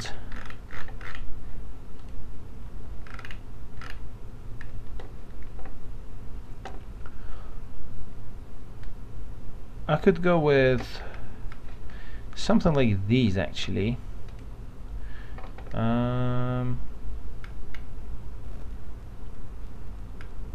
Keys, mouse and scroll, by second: 2.0 click, 3.1 scroll down 1, 14.3 click, 17.4 scroll down 1.